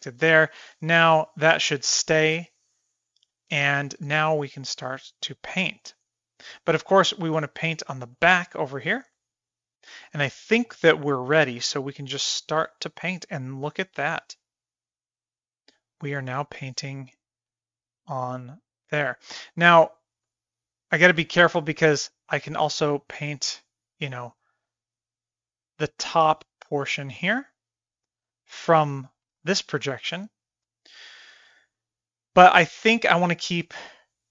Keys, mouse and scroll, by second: 1.1 click, 3.6 f, 5.7-6.9 middle drag, 7.3-8.0 middle drag, 8.2 middle click, 9.3 middle click, 12.2-19.1 drag, 19.3-20.1 middle drag, 20.4 shift+middle click, 21.2 shift+middle click, 22.2-28.8 drag, 29.6 shift+middle click, 29.8-30.4 middle drag, 31.0 shift+middle click, 32.7 f.